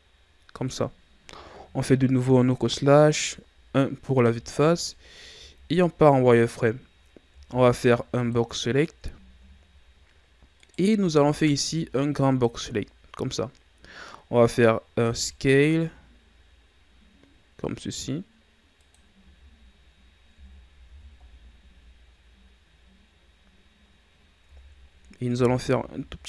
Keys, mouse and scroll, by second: 1.5 KP_Divide, 3.0 KP_1, 4.7-5.4 scroll up 1, 5.4 z, 7.2 ctrl+Tab, 9.0-10.5 scroll down 4, 10.5 right click, 11.0 b, 20.3 Tab, 20.8 a, 21.1-21.7 scroll down 4, 22.6-23.4 scroll up 2, 24.4 Tab, 25.3 s.